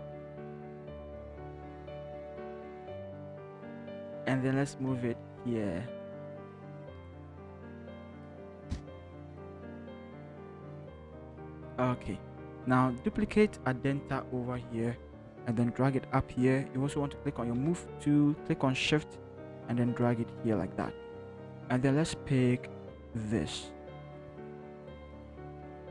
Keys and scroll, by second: 1.7 ctrl+t, 2.4 ctrl+shift+t, 2.7 ctrl+shift+Left, 4.2 ctrl+shift+Left, 4.9 Left, 5.6 Left, 6.5 Right, 6.7 Right, 7.0 Right, 7.5 Up, 7.7 Up, 7.9 Up, 8.1 Up, 8.2 Up, 9.6 Up, 9.8 Up, 10.0 Up, 10.6 v, 10.7 Up, 10.9 Up, 14.5 ctrl+j, 17.6 v, 24.5 ctrl+c.